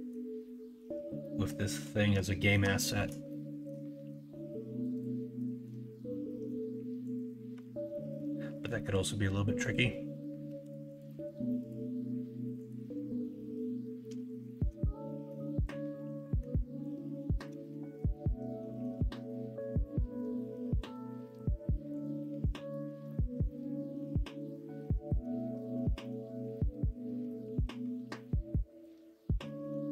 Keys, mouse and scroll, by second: 1.2 middle click, 2.3 shift+middle click, 2.8 middle click, 3.3 shift+middle click, 5.3-5.6 middle drag, 6.3 middle drag, 7.6 alt+z, 7.9 middle click, 8.6 middle drag, 10.5 3, 14.3 shift+middle drag, 15.1 middle click, 15.4 middle click, 18.1-18.8 middle drag, 19.1 middle click, 20.3 middle click, 23.3 middle click, 24.0 alt+z, 24.7 middle click, 25.6 alt+z, 26.3 Tab, 27.4 ctrl+r.